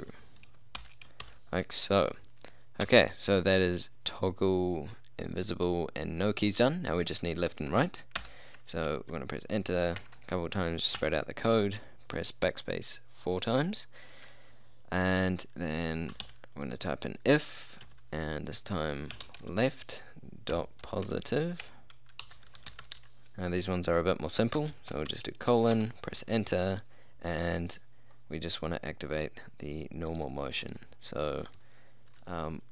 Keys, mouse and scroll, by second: 0.0-1.3 typing, 2.4 shift+0, 2.9 Return, 8.3 Return, 10.1-10.5 BackSpace, 11.1 BackSpace, 16.2 i, 16.3 f, 17.9 space, 19.2-23.0 typing, 25.0 shift+;, 25.8 Return.